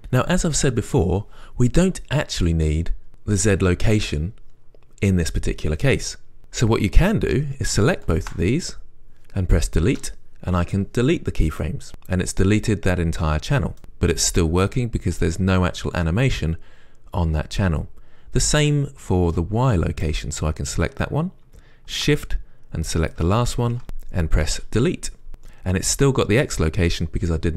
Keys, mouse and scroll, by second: 6.4 click, 8.3 shift+click, 11.0 Delete, 13.8-20.9 right drag, 20.9-23.4 drag, 25.4 Delete.